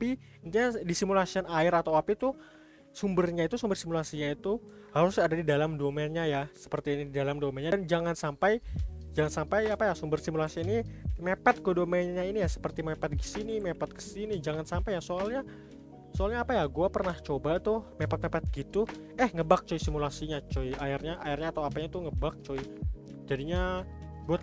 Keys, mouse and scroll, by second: 2.9-3.6 scroll up 3, 3.6-4.9 shift+middle drag, 4.9 scroll down 2, 5.5-10.5 middle drag, 10.5 g, 14.9-18.0 middle drag, 19.3-20.5 middle drag, 20.5 click, 20.9 click, 21.6-22.0 middle drag, 22.0 click, 22.3 scroll up 1, 22.5-23.7 middle drag, 23.7 click.